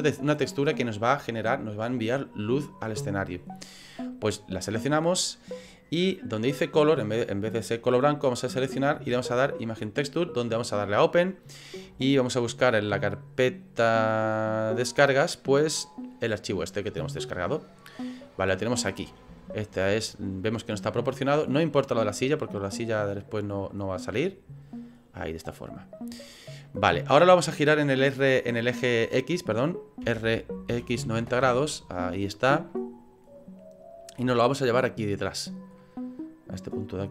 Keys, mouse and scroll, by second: 8.0 click, 10.6 click, 18.2 middle click, 18.9-19.3 scroll up 4, 19.4 shift+middle click, 19.9 middle click, 21.7 click, 23.2 click, 25.3 middle click, 26.2-26.6 scroll down 4, 26.6 middle click, 27.0 middle click, 32.7 middle click, 32.7 r, 34.0 click, 35.1 click, 35.8 middle click, 36.6 click.